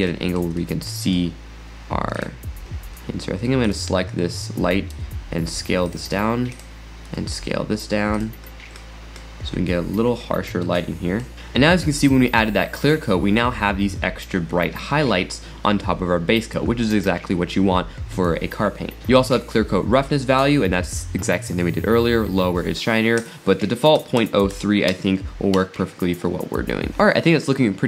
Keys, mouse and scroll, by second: 2.2 drag, 2.7 scroll down 1, 3.7 click, 4.1 scroll down 1, 4.9 s, 6.6 click, 7.2 s, 8.5-9.7 scroll up 12, 10.7 middle click, 11.3 click, 19.0 click, 23.2-26.3 drag, 26.9 click.